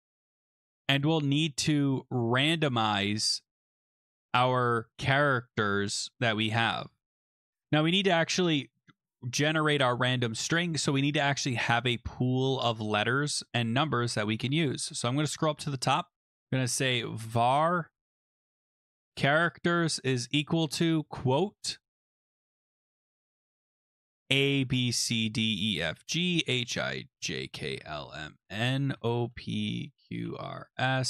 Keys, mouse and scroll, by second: 4.2 click, 7.6 click, 7.6 BackSpace, 10.4 Return, 14.3-15.8 scroll, 15.8 click, 16.2 Return, 16.4-21.5 typing, 22.1-22.7 scroll, 23.6-31.0 typing, 23.9 middle click.